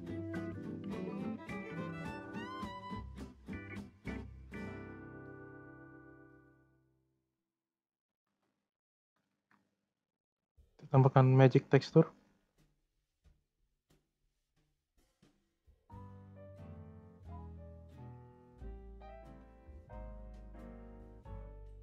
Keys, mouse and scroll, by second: 0.8-1.6 middle drag, 1.6 scroll up 1, 1.9-3.0 middle drag, 3.0-3.4 scroll down 2, 3.4-4.6 middle drag, 4.6 scroll up 2, 4.9 middle click, 5.6 scroll up 1, 5.9-6.9 middle drag, 6.9-7.2 scroll up 1, 7.2 scroll down 3, 7.5-7.9 middle drag, 7.9 click, 8.2 shift+a, 10.8 click, 13.4-14.8 scroll up 1, 17.9-19.2 scroll up 4, 19.2-21.8 drag.